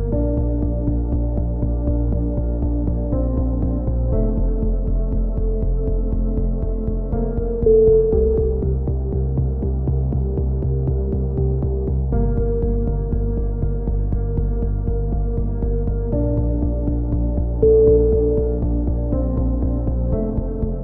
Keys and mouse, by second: 0.9 right click, 1.0 middle click, 1.7 f, 1.8-2.9 middle drag, 2.5 a, 2.9-6.4 drag, 6.0-7.0 right drag, 6.4 f, 6.4 a, 7.0 click, 7.5 click, 7.6 a, 7.7 a, 7.8 click, 15.3 right click, 15.7 KP_7, 16.0 click, 18.5 click.